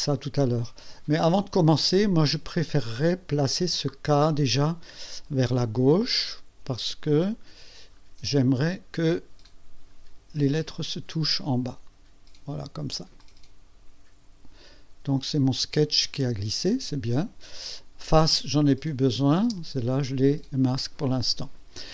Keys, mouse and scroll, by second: 7.0 click, 7.2 click, 7.9 scroll up 1, 8.4-10.9 scroll down 11, 12.1 scroll down 2, 13.2 click, 17.7 click, 18.2 space, 19.0 click, 19.5 space.